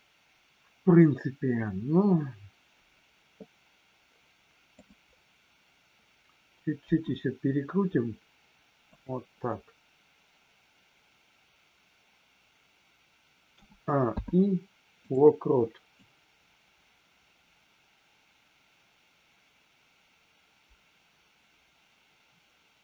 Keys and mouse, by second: 4.6 click, 6.7 r, 8.9 click, 14.0 i, 16.0-22.8 drag.